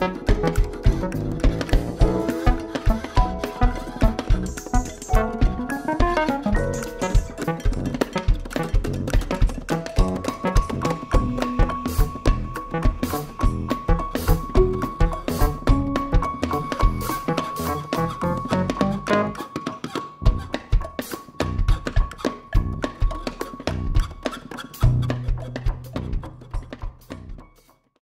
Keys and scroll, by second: 6.7 ctrl+r, 7.1 ctrl+r, 20.4 c, 20.6 x, 21.3 shift+c, 25.4-27.2 typing.